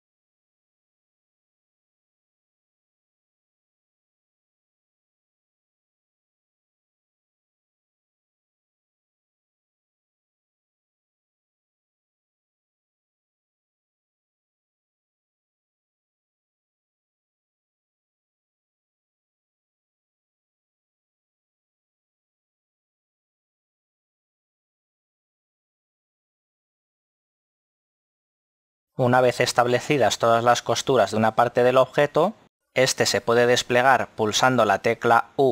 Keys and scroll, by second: 3.5 ctrl+e, 10.5 z, 19.4 ctrl+e, 23.2 a, 25.3 l, 27.9 z, 32.6 shift+h.